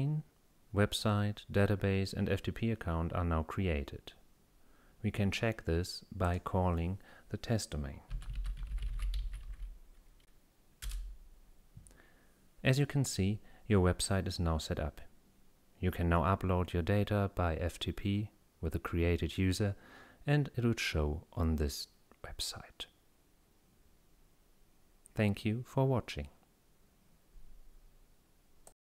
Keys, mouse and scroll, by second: 6.3 click, 7.9-10.0 typing, 10.9 Return, 28.7 click.